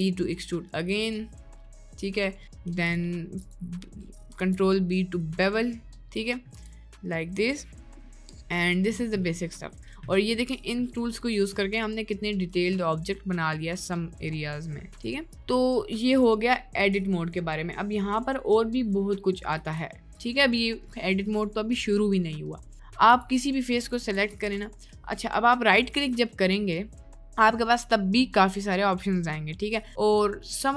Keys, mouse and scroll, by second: 0.0 e, 1.3 middle click, 2.2 middle click, 2.7 2, 2.8 click, 4.5 ctrl+b, 6.5 Tab, 6.8 middle click, 8.1 middle drag, 8.3-8.9 middle drag, 9.4 middle drag, 11.1-11.6 middle drag, 11.9-12.3 middle drag, 12.9-13.3 middle drag, 19.7 Tab, 20.1 middle click, 21.3 middle click, 22.4 middle click, 24.1 3, 26.8-30.7 right drag.